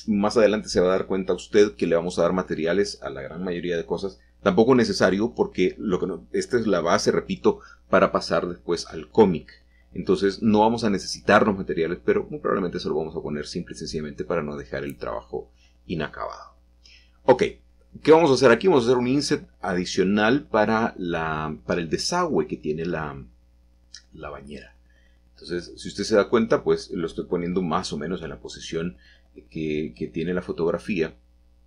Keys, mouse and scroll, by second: 1.8-2.3 shift+middle drag, 3.2-4.4 shift+middle drag, 7.5 middle click, 8.4-9.9 scroll up 2, 9.4-10.9 drag, 10.9 middle click, 12.5 middle click, 13.9-15.0 scroll down 1, 14.7-15.1 middle drag, 15.0 click, 15.4 Tab, 15.9 click, 17.0 3, 17.2 click, 18.6 i, 20.3 click, 21.3 s, 23.3-24.4 drag, 24.7 g, 28.3 click, 28.9 s, 31.1 click.